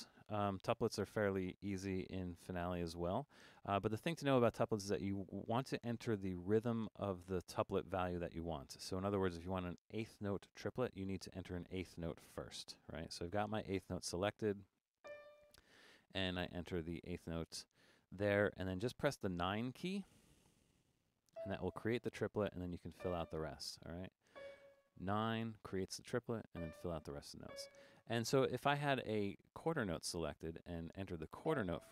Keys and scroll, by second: 19.4 9, 25.3 9, 28.4 5.